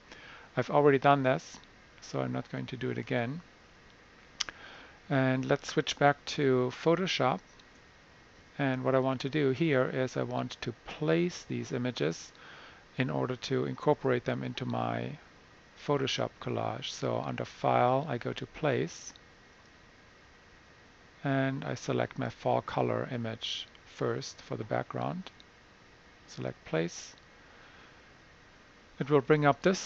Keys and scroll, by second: 3.7 Escape.